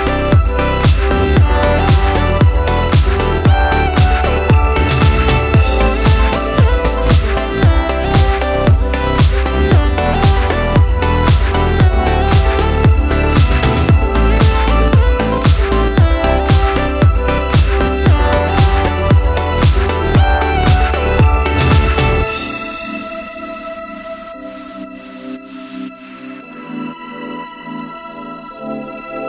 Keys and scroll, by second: 11.7 Escape, 13.4 ctrl+a, 19.3 ctrl+c, 19.9 ctrl+v, 22.0 ctrl+t, 22.9 Escape, 24.6 Return.